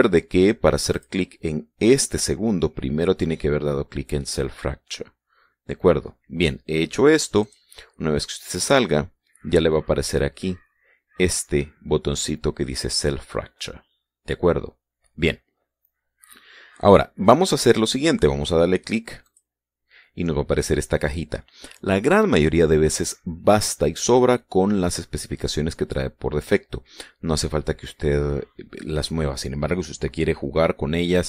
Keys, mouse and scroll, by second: 1.5 click, 8.0-12.7 drag, 19.9 click.